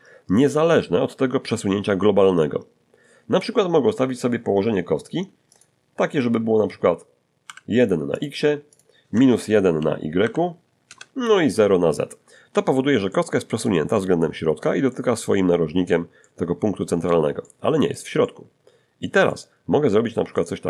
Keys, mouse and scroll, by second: 5.5 click, 7.4 1, 8.1 click, 8.7 click, 10.2 -, 10.2 1, 10.9 Return, 13.1 middle click, 13.9 middle click, 14.9 middle click, 16.2-17.3 middle drag, 17.4 middle click, 18.2-19.2 middle drag.